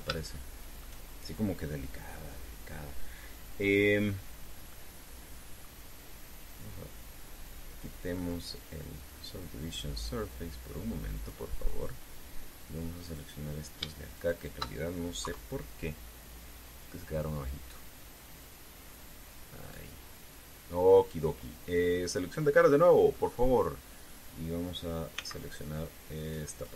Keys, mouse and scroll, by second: 0.9 shift+middle click, 5.5-6.5 middle drag, 9.7 click, 11.9 click, 13.9 right click, 14.9 shift+right click, 15.9 KP_3, 18.2-20.7 drag, 23.4 click, 23.9 middle click, 25.9 c, 26.5 click.